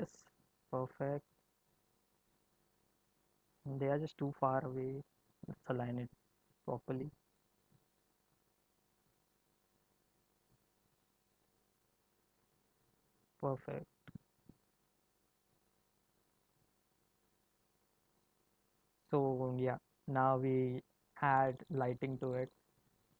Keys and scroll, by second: 0.5 space, 11.4 g.